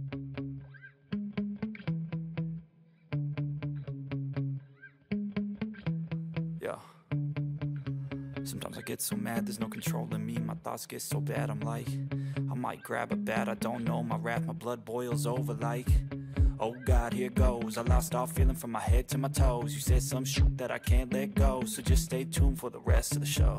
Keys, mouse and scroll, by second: 17.4 ctrl+=, 17.8 ctrl+=, 18.9 ctrl+=, 19.6 ctrl+-, 19.7 ctrl+-, 19.9 ctrl+-, 21.7-22.9 scroll up 1, 22.9-23.5 scroll up 6.